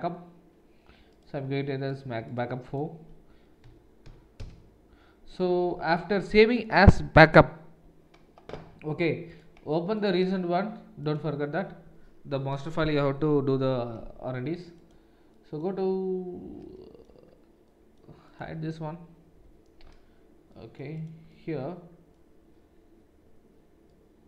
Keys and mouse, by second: 9.3-14.8 drag, 14.8-24.2 middle drag, 19.3 h.